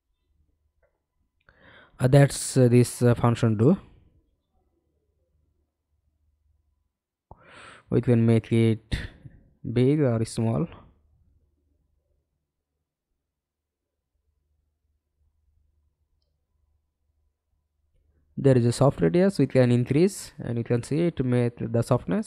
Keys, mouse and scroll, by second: 0.1-2.4 scroll up 32, 2.4-3.1 scroll down 2, 9.5-12.6 scroll up 1, 12.6-22.2 scroll up 1.